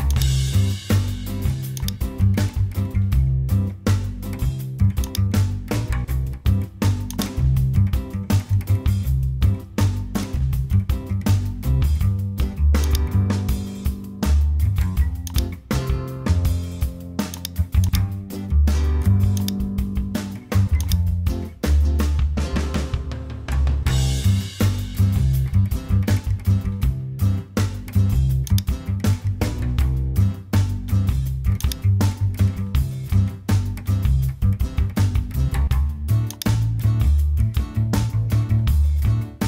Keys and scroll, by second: 9.9 Return.